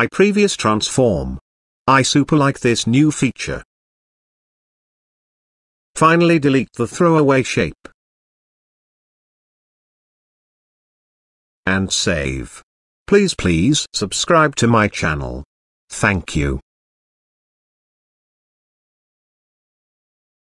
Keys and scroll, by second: 1.9 ctrl+alt+d.